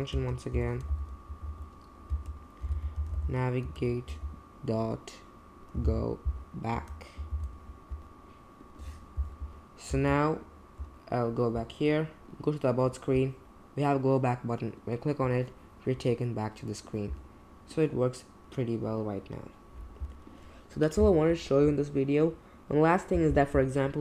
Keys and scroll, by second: 0.1 space, 0.5 =, 0.9 shift+., 1.3 Escape, 1.5 Escape, 2.1-4.1 typing, 5.5-7.3 typing, 9.9 super+Tab.